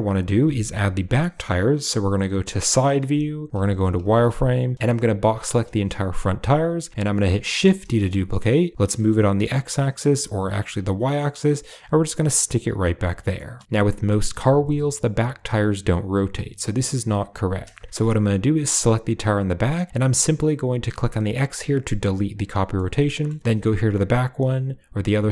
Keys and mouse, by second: 2.8 KP_3, 3.5 z, 4.7 b, 4.7 a, 7.9 shift+d, 12.7-13.2 typing, 13.2 middle click, 13.5 shift+middle click, 17.6 shift+middle drag, 18.4 click, 22.6-23.1 middle drag, 23.7 click.